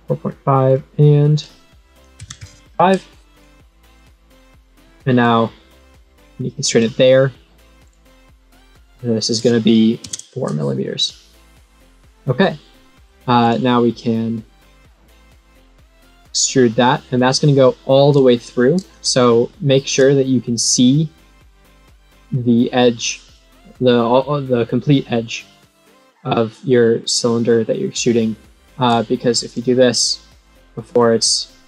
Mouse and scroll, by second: 0.6 click, 1.2 click, 3.2 right click, 3.9 click, 5.2-6.7 drag, 8.5 click, 9.1 click, 10.9 right click, 11.6 click, 13.4 click, 15.5 click, 16.2 click, 18.2 middle click, 18.8 middle click, 19.1 middle click, 19.6 middle click, 20.6 click, 22.1-23.2 middle drag, 23.9 middle click, 26.6 middle click, 27.0 middle click, 28.4 middle click, 29.5-30.9 drag, 31.2-31.6 scroll up 1.